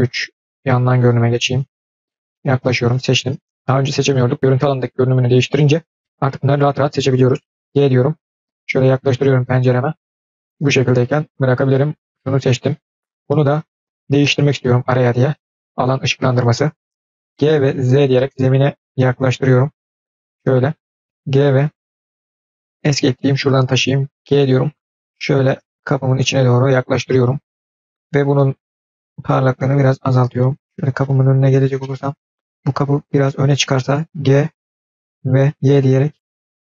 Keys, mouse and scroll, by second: 0.1 KP_3, 0.6-1.7 scroll up 5, 1.7-2.0 scroll down 3, 2.1-2.5 shift+middle drag, 2.7 click, 11.5 click, 14.3 click, 15.2 click, 28.2-29.7 drag, 30.6 middle click, 30.6-31.5 scroll up 8, 31.6 middle click, 32.3 scroll down 1, 32.6 click, 34.0 g.